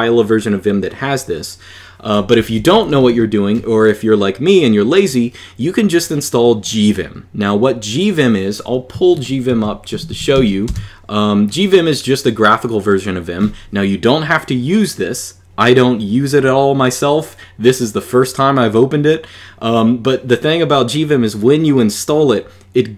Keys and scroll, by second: 2.1-2.9 typing, 8.9 super+3, 9.2 super+d, 9.4-10.6 typing.